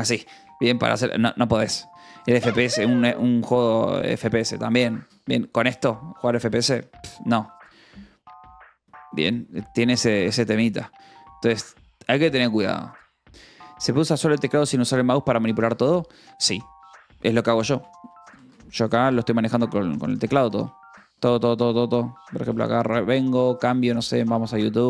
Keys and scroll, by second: 18.0-19.4 typing, 23.0 l, 24.2 y.